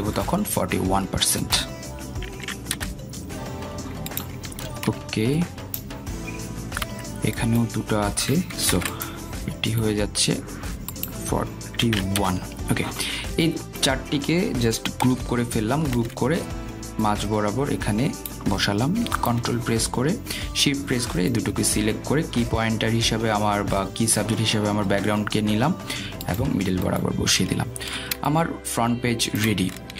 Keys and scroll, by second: 0.2 Return, 4.8 Return, 8.9 Delete, 10.9 ctrl+z, 14.2 Return, 17.1 ctrl+g.